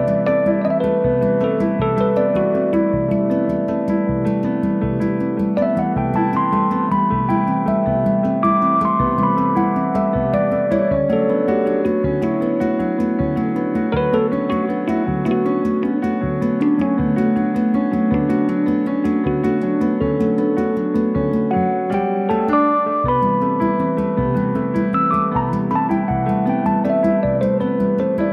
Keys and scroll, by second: 0.3 Return, 1.4 3, 2.2 Return, 2.7 r, 4.2 space, 5.1 m, 7.2 Return, 8.4 l, 9.6 1, 10.1 Return, 12.4 1, 13.0 Return, 14.2 9, 14.4 Return, 15.1 Escape, 16.8 1, 17.1 Return, 18.2 9, 18.4 Return, 19.4 space, 22.2 f, 23.1 1, 23.5 Return, 24.6 1, 24.9 Return, 25.8 Delete, 26.6 space.